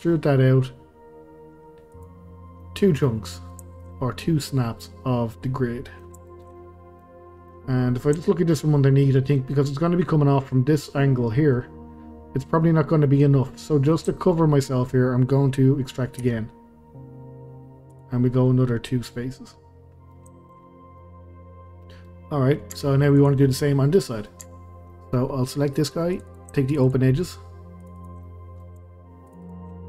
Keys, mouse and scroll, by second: 2.3 scroll down 2, 2.6-7.5 middle drag, 7.5-8.2 scroll up 2, 8.2 shift+middle click, 8.7-9.2 scroll up 2, 9.2-13.4 middle drag, 13.4 scroll down 2, 13.7 middle click, 14.6-14.9 scroll up 2, 14.9-16.2 middle drag, 16.2 e, 18.2 scroll down 2, 18.5-20.7 middle drag, 20.7-21.0 scroll up 2, 21.0-22.7 middle drag, 22.7 Tab, 23.2 click, 23.5-24.4 middle drag, 24.4 Tab, 24.9-25.3 middle drag, 25.3-26.1 scroll up 2, 26.1 click, 26.3 click, 26.7 shift+click, 26.8 shift+click, 27.8 shift+click, 28.0 shift+click, 28.2-29.3 middle drag, 29.3 shift+click, 29.4 shift+click, 29.7 middle click.